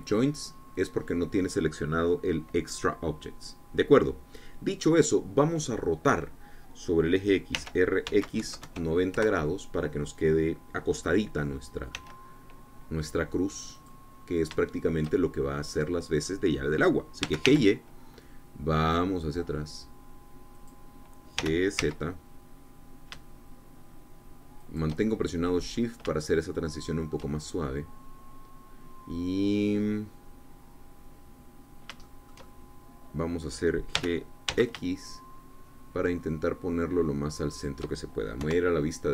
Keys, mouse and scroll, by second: 8.5 r, 9.0 x, 9.3 KP_9, 9.5 KP_0, 10.0 KP_Enter, 12.8 s, 14.6 click, 15.1-15.6 scroll up 2, 15.6 shift+click, 16.3-18.1 shift+drag, 18.1 g, 18.4 y, 21.5 click, 22.3 g, 22.7 z, 25.5-26.6 shift+drag, 26.7 middle click, 27.2-28.2 shift+drag, 28.2-34.9 shift+drag, 34.9 g, 35.4 x, 38.4 shift+click.